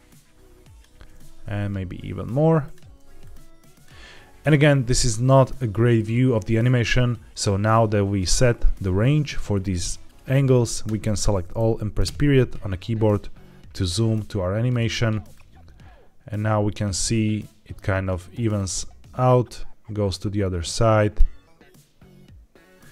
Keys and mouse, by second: 1.2 g, 3.1 click, 10.7 a, 11.9 KP_Decimal, 14.6 click, 15.2-17.6 drag, 18.4-22.9 drag.